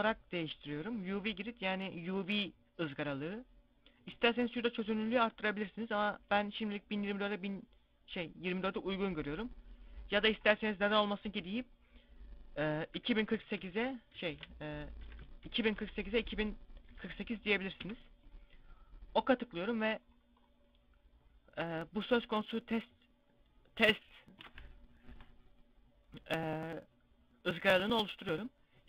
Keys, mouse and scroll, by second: 19.8 scroll up 1, 19.9 scroll down 1, 23.4 scroll down 9, 28.7 middle click.